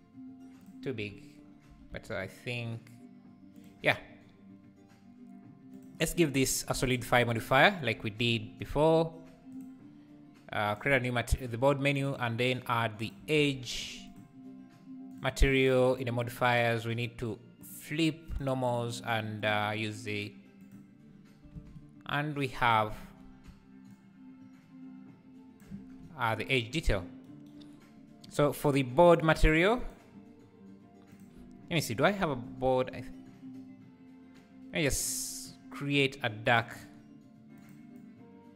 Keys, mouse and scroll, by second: 6.9-9.6 drag, 12.1-16.3 drag, 17.6-21.5 drag, 21.5 alt+scroll down 1, 21.5 alt+a, 24.1-25.8 shift+drag, 25.8-29.8 scroll down 1, 30.3-31.1 scroll down 2, 31.1 drag, 32.1 t, 32.4 t, 37.5 click.